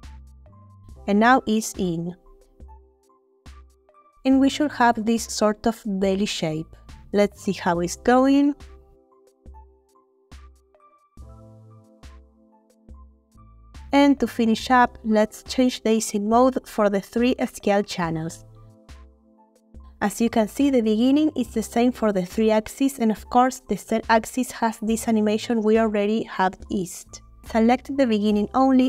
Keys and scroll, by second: 10.2 space, 13.9 space, 18.6 a, 18.8 Home.